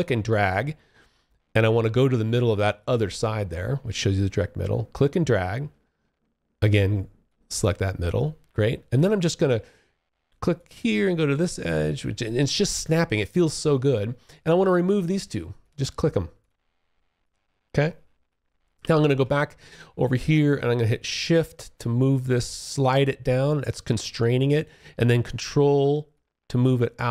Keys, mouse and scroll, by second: 4.1 click, 7.7 alt+click, 14.8 click, 15.5 click, 16.4 alt+click, 17.9 space, 18.2 3, 20.2 shift+click, 25.3 ctrl+click.